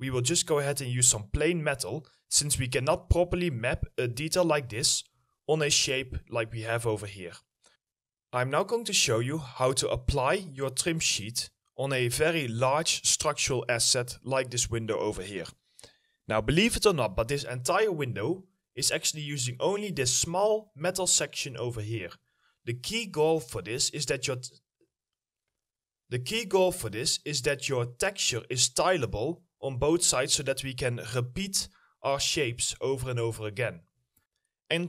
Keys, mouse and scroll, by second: 0.8 double click, 2.3 middle click, 7.4 middle click, 7.6 scroll down 1, 9.9 alt+middle click, 11.2 alt+middle click, 32.7 right click, 32.9 a.